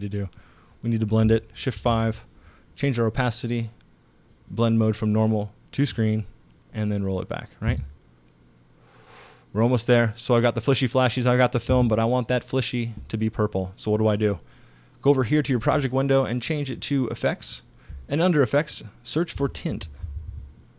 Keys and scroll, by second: 1.8 shift+5, 7.7 space, 11.7 space, 19.1-20.7 typing.